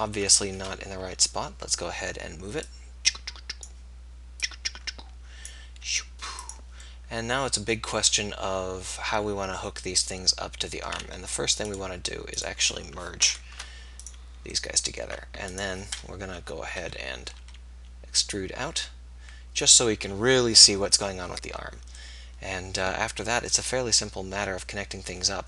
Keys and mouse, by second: 1.0 KP_3, 6.0 s, 7.5 middle click, 10.9-13.1 middle drag, 13.1 right click, 13.4 alt+m, 16.5 KP_3, 16.9 KP_1, 17.6 e.